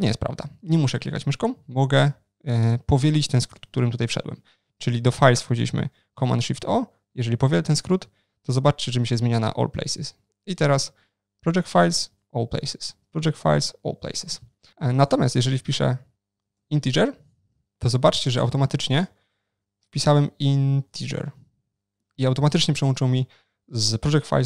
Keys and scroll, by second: 6.2 shift+super+o, 6.3 ctrl+shift+n, 19.1 shift+super+o, 19.3 ctrl+shift+n.